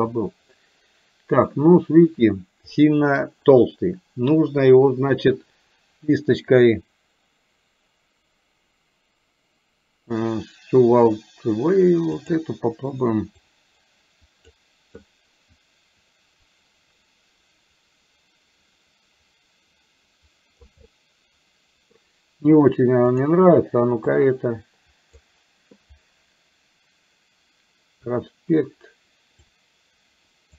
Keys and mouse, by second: 2.8 middle click, 13.6-14.7 drag, 15.1-20.7 drag, 20.9-21.9 middle drag, 23.2 click, 24.2-25.3 drag, 29.4-30.5 drag.